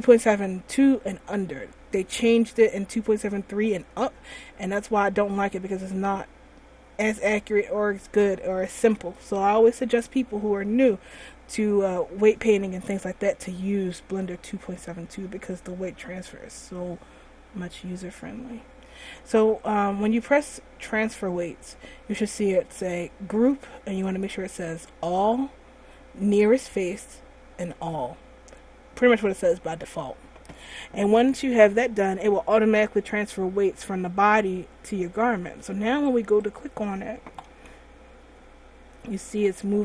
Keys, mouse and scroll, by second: 24.2 click, 36.5 right click, 37.8 r.